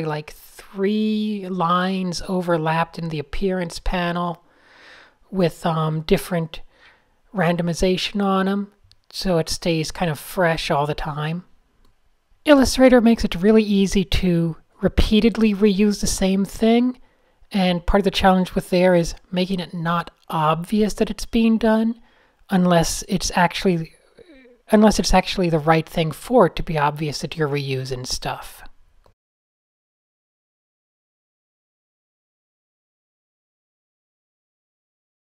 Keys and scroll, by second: 0.1 alt+super+g, 2.0 shift+9, 4.3 shift+super+a, 4.6 v, 5.1 o, 6.2 a, 6.6 shift+Right, 6.7 shift+Right, 6.8 shift+Right, 6.8 shift+Right, 7.0 shift+Up, 7.1 shift+Up, 7.2 shift+Up, 7.5 r, 10.5 n, 10.9 super+z, 16.0 v, 17.2 n, 22.0 n, 22.4 super+z, 23.2 super+z, 23.2 super+z, 23.6-24.2 typing, 24.4 super+z, 26.0-26.3 typing, 26.6 super+z, 28.8 super+z.